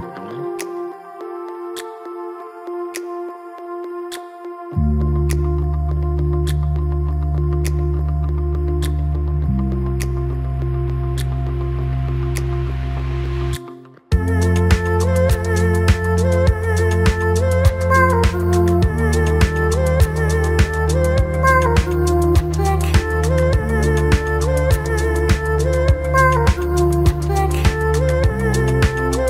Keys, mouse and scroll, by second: 0.5 click, 1.5 alt+middle click, 1.9 click, 2.2 click, 2.5 ctrl+click, 2.8 ctrl+click, 3.4-4.1 right drag, 6.8 click, 7.4 alt+middle click, 7.8 click, 8.2 right click, 9.5 ctrl+click, 9.7 right click, 11.0 click, 11.2 alt+middle click, 11.6 click, 12.6 shift+click, 12.9 right click, 14.1 click, 14.5 ctrl+click, 14.8 ctrl+click, 15.2 right click, 15.9 click, 16.7 alt+middle click, 17.9 right click, 19.8 ctrl+drag, 20.1 right click, 20.9 click, 21.4 Tab, 21.6-22.0 alt+right drag, 22.0-22.8 alt+drag, 23.0 scroll up 1, 23.2 Tab, 23.3 alt+middle click, 23.6-24.0 scroll up 2, 23.7 alt+middle click, 24.0 click, 25.9 click, 26.9 click, 27.2 f, 27.8 click, 28.2 click.